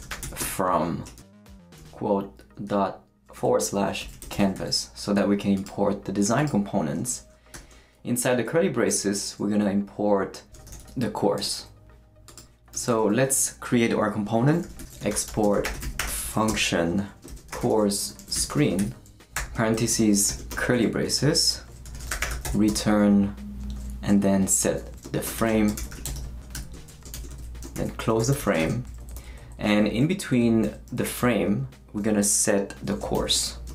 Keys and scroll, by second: 0.0-5.0 typing, 7.0 space, 7.5 shift+[, 10.7 shift+o, 11.3 u, 11.4 Return, 12.7 Return, 14.4-20.3 typing, 19.7 shift+Right, 20.5 shift+Return, 21.4 Return, 21.6-22.9 typing, 25.1-28.9 typing, 29.0 shift+Left, 30.9 Right, 33.1-33.7 typing.